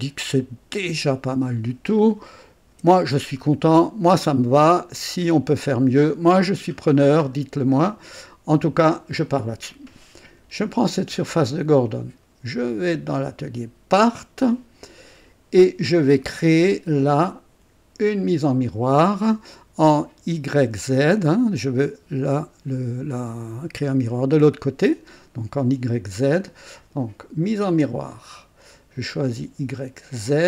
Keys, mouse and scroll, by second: 2.8 &, 3.3-4.0 scroll down 2, 4.3 click, 5.7-7.1 drag, 7.2 scroll up 1, 7.7-9.0 drag, 10.8 click, 14.1 click, 27.7 click, 29.2 click, 30.3 click.